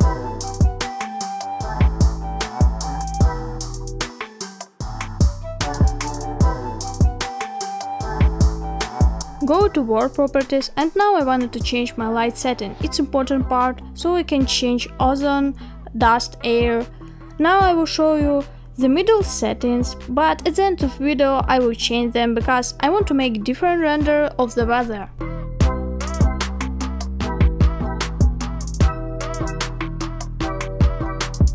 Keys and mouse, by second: 3.3-4.5 middle drag, 5.0-5.3 shift+middle drag, 5.5-7.2 middle drag, 9.9 click, 11.3-19.0 drag, 23.1-25.2 drag, 30.3 click.